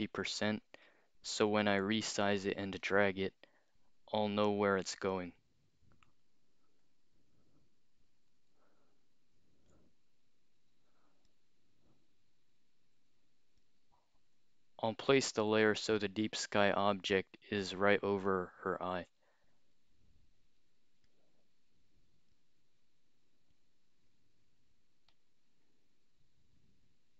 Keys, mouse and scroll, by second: 2.8 click, 8.6-9.7 alt+shift+drag, 11.3-13.7 drag, 16.0-19.0 alt+shift+drag, 21.1-22.4 drag, 22.6-23.1 scroll up 4, 25.1-27.1 alt+shift+drag.